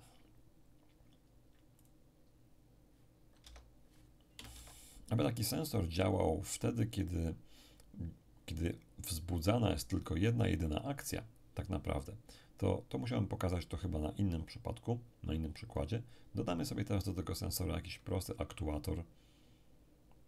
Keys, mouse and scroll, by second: 1.8 click, 3.4 Tab, 4.3 BackSpace, 4.5 Tab, 13.9-16.1 drag, 16.1-18.2 scroll down 1.